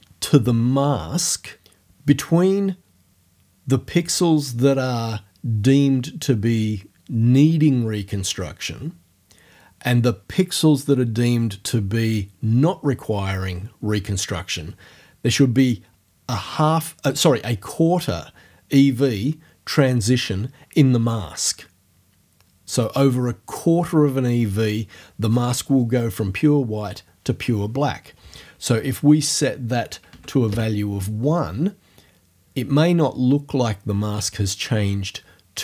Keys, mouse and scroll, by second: 29.2 right click, 30.1 1, 30.5 Return.